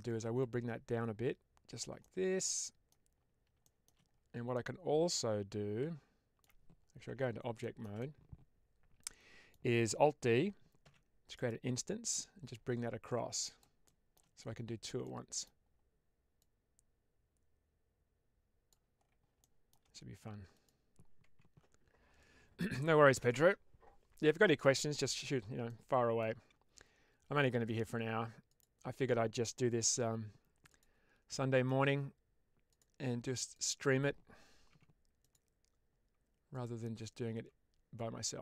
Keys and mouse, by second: 0.3-1.7 drag, 1.9 middle click, 3.6 shift+middle click, 4.4-6.3 middle drag, 7.0 Tab, 7.5 middle click, 7.9-9.4 middle drag, 11.3 right click, 12.1-13.5 drag, 13.7-14.1 shift+middle drag, 14.9 middle click, 16.3-18.6 drag, 19.3 shift+middle click, 21.1 Tab, 25.6 middle click, 28.4 click, 29.9 2, 31.2 middle click, 32.6 click, 33.4 click, 34.6 Tab, 35.1 click, 37.2 Tab.